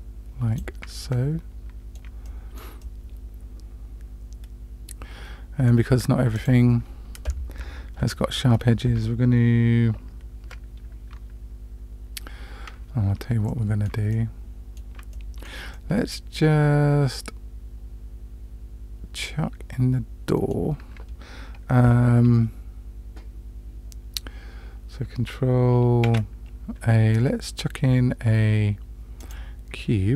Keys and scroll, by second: 26.0 shift+a.